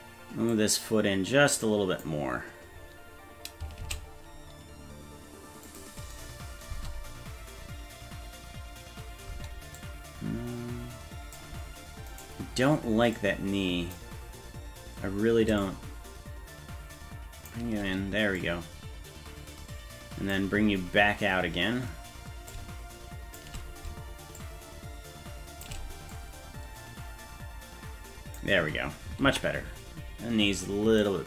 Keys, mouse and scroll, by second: 0.6-2.1 drag, 3.9 shift+d, 6.7 space, 9.3 space, 9.8-11.4 drag, 12.2-13.3 right drag, 13.3 click, 15.6-17.5 shift+drag, 18.4-20.4 drag, 20.7-21.4 scroll down 3, 22.5 shift+click, 22.5 scroll down 1, 24.4-25.7 shift+drag, 26.2-28.4 drag, 29.5 ctrl+s, 29.7-30.7 scroll up 5, 31.1-31.2 drag.